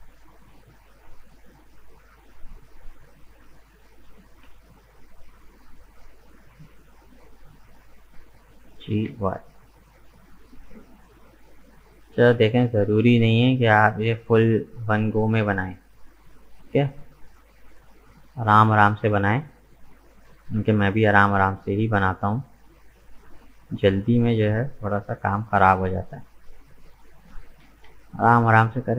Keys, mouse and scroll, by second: 0.3 right click, 0.5-0.9 scroll up 2, 2.0 shift+right click, 3.5 shift+right click, 4.3 ctrl+z, 6.6 shift+right click, 7.0-7.4 scroll down 1, 7.4-8.8 middle drag, 8.8 g, 11.0 scroll down 2, 11.2-13.8 middle drag, 13.8 ctrl+r, 16.7-18.1 middle drag, 18.1 right click, 18.6 shift+right click, 19.1 shift+right click, 19.5 middle click, 20.2 g, 22.6-24.1 middle drag, 24.1 right click, 24.9 shift+right click, 25.5 shift+right click, 25.9 scroll down 2, 26.2-27.6 middle drag, 27.6 g.